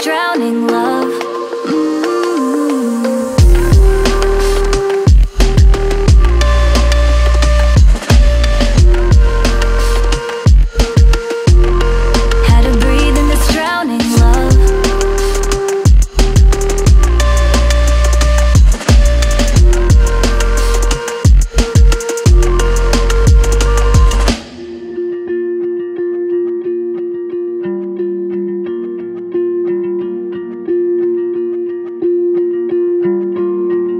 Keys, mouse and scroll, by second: 7.5 ctrl+click, 11.6 ctrl+scroll down 1, 17.8 right click, 25.6 double click.